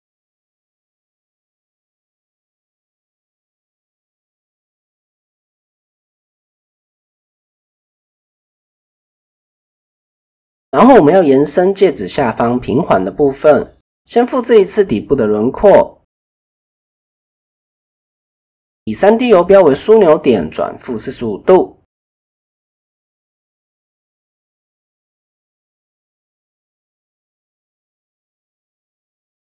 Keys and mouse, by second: 2.1 click, 3.4-5.8 drag, 5.7 typing, 6.4 middle click, 7.2 middle click, 7.7 shift+middle click, 9.3 KP_1, 9.7 KP_3, 10.2 KP_1, 11.1 shift+middle click, 11.9 shift+middle click, 14.3 click, 14.9 click, 16.1 shift+d, 17.8-20.9 drag, 21.8 r, 23.5-24.6 drag, 25.3 shift+middle click, 26.3 shift+middle click, 26.7 middle click, 29.1 KP_1.